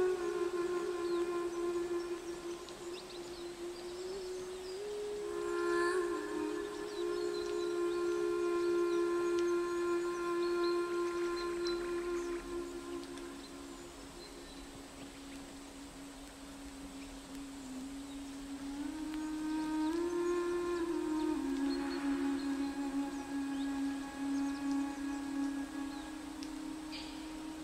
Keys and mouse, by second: 0.5-1.8 drag, 2.2-3.5 drag, 4.4-5.9 drag, 5.9 middle click, 6.5 click, 7.2 click, 7.8 middle click, 8.0 middle click, 8.1 middle click, 8.6 middle click, 8.8 click, 12.2 ctrl+s, 20.8 ctrl+s, 22.2-23.6 drag, 25.2 ctrl+s.